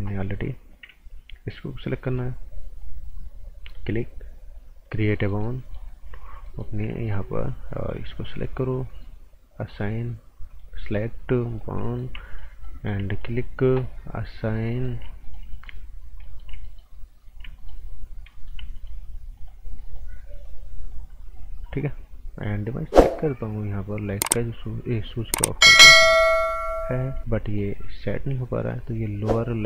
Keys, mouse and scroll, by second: 2.0 click, 5.1 right click, 7.0 alt+right click, 7.9 click, 11.8 right click, 12.2 right click, 13.1 right click, 14.4 click, 14.7 right click, 15.2 right click, 16.6 right click, 17.6 right click, 18.0-18.3 scroll up 1, 18.3 right click, 18.7 alt+right click, 19.3 alt+right click, 20.4 click, 25.7 click, 27.4 alt+right click.